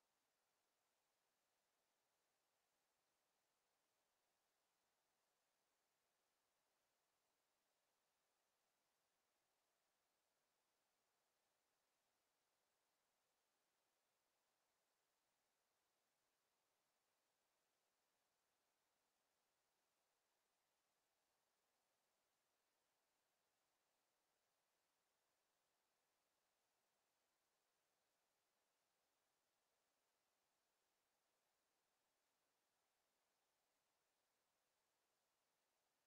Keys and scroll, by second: 3.4 Delete, 9.9 Delete.